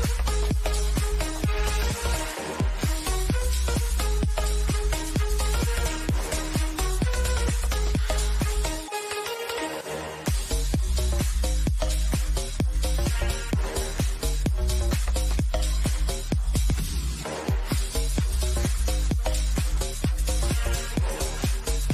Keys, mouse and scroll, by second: 1.5 click, 13.1 click, 16.5-18.1 drag, 18.1 Return, 19.0 click, 21.1 scroll down 1.